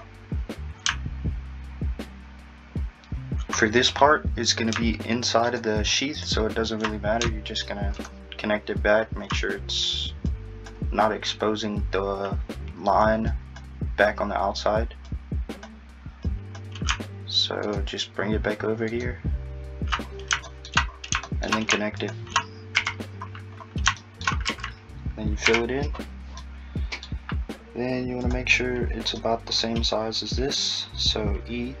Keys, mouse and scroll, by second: 0.1-0.5 scroll down 2, 0.5-2.8 scroll up 3, 5.5 ctrl+Right, 6.9-7.9 scroll down 2, 7.9 ctrl+Right, 10.3 Left, 17.8 ctrl+right click, 18.9 ctrl+right click, 20.1-20.5 scroll up 1, 20.5 shift+middle click, 20.9-21.3 scroll up 1, 21.3 shift+middle click, 22.0 shift+click, 22.8 f, 23.2-24.0 scroll down 7, 24.0 shift+middle click, 24.5 a, 25.5 f, 26.0 scroll down 3, 26.4 middle click, 28.3 click, 29.0 scroll down 1, 29.2 middle click, 29.8-31.8 scroll up 2.